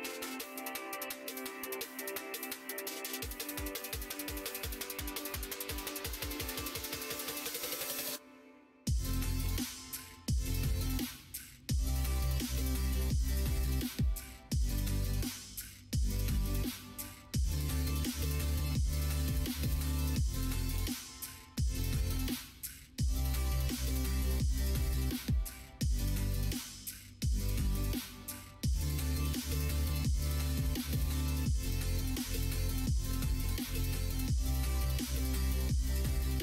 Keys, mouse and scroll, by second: 0.0 e, 1.8 middle click, 3.4 2, 3.6 click, 4.0 shift+click, 5.0 f, 5.5 middle click, 6.2 ctrl+r, 9.2 middle click, 10.7 middle click, 12.1 click, 13.3-16.0 drag, 16.0 e, 18.5 ctrl+r, 23.3 2, 23.9 alt+click, 24.3 x, 26.2 2, 27.1 shift+click, 27.7 f, 28.9 shift+click, 30.0 right click, 33.1 ctrl+r, 36.1 ctrl+z, 36.3 ctrl+z.